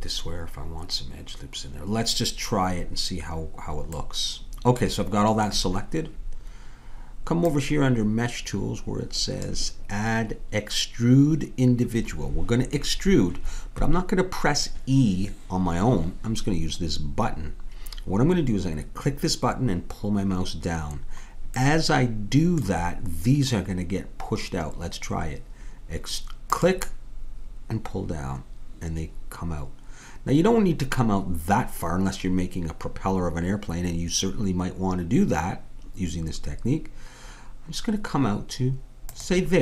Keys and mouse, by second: 4.0-7.4 middle drag, 7.4-9.2 drag, 21.8-26.5 middle drag, 26.5-28.5 drag.